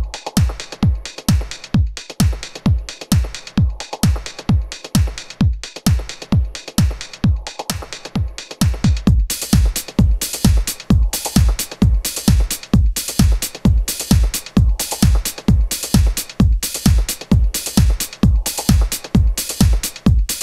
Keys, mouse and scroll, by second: 0.1 KP_0, 1.6 shift+a, 14.6 Tab, 15.0-16.2 typing, 16.7 Return, 17.3-18.4 typing, 20.2 Tab.